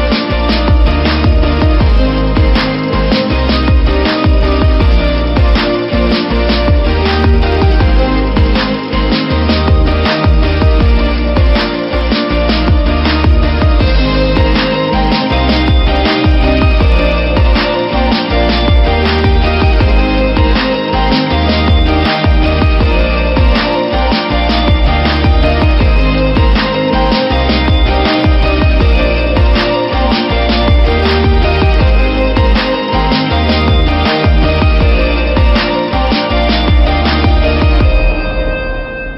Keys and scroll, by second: 0.0 ctrl+=, 3.1 v, 9.7 Return, 13.0 ctrl+t, 14.4 Return, 15.5 ctrl+j, 16.9 ctrl+t, 19.4 Return, 21.0 space, 21.4 F9, 25.2 space, 28.4 F1, 29.6 ctrl+t, 33.4 Return, 34.4 ctrl+j, 38.3 Return.